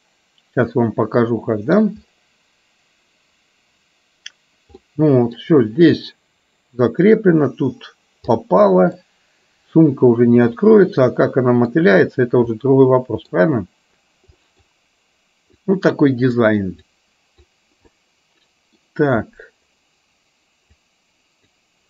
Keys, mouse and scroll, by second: 0.7-1.9 middle drag, 4.9 middle click, 8.4 middle click, 10.6-11.9 middle drag, 12.5 middle click, 14.5 middle click, 15.6 click, 17.0 click, 18.0 middle click, 20.9 click.